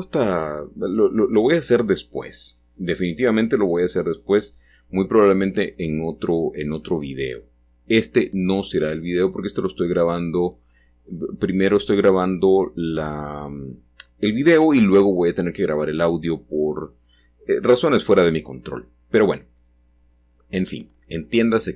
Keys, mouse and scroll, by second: 0.0 click, 3.3-15.4 drag, 15.4 ctrl+z, 18.0 g, 21.6-21.7 drag.